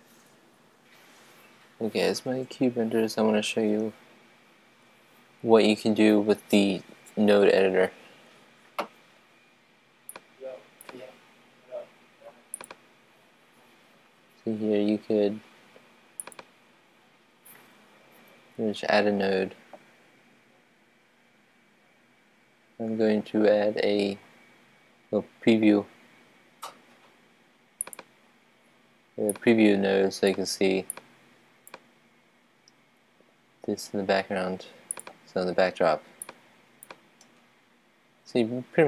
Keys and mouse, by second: 10.4-15.3 drag, 25.7-33.9 drag.